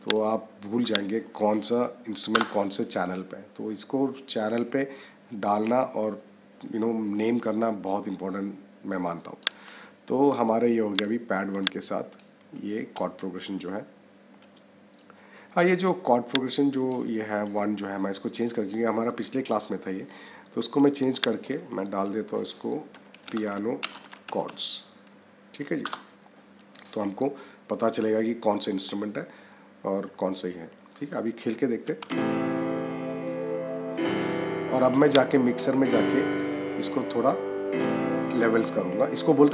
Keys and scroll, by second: 2.2 Return, 22.8 p, 23.7 space, 24.0 c, 25.7 Return, 31.9 space.